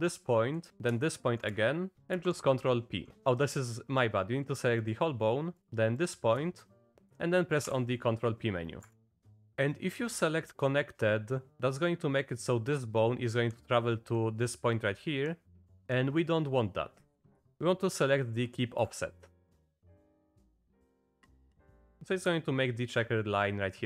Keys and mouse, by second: 2.0 ctrl+p, 2.2 ctrl+p, 4.8 click, 6.0 shift+click, 7.1 ctrl+p, 7.7 p, 9.4 ctrl+p, 17.5 ctrl+p, 21.9 click.